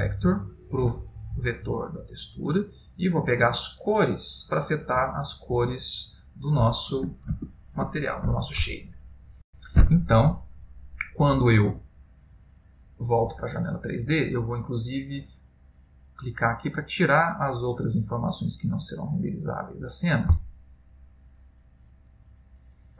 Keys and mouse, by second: 7.4 ctrl+space, 18.9 click.